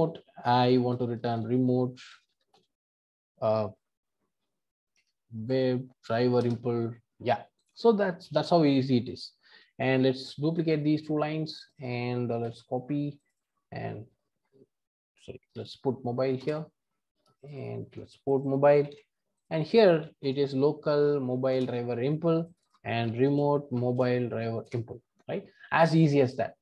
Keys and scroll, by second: 6.5 Return, 12.4 super+c, 16.5 Return, 17.8 super+c, 18.8 super+v, 21.6 Return, 24.7 Return.